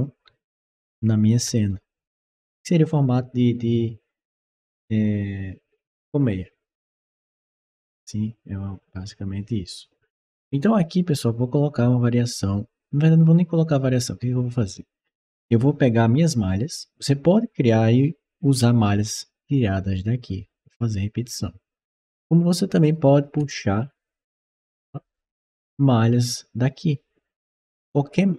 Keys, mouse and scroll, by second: 22.0 click, 24.6 click.